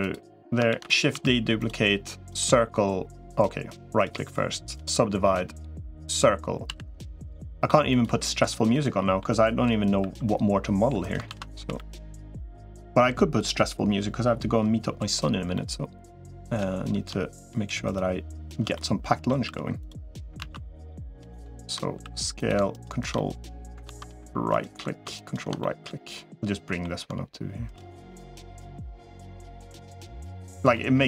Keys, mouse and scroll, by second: 0.0 3, 0.6 shift+d, 1.0 s, 2.2 click, 3.8-4.8 right drag, 5.8 click, 6.4 s, 8.5 middle click, 9.8 e, 11.2 ctrl+z, 11.6 g, 12.3 middle click, 15.4-16.4 middle drag, 18.6 middle click, 19.4 s, 20.2 ctrl+z, 21.8 s, 22.6 ctrl+right click, 23.0 middle click, 23.8 ctrl+z, 24.4 ctrl+right click, 25.0 ctrl+right click, 25.4-26.7 middle drag, 27.9 middle click, 28.6 middle click, 29.6 r, 30.6 middle click.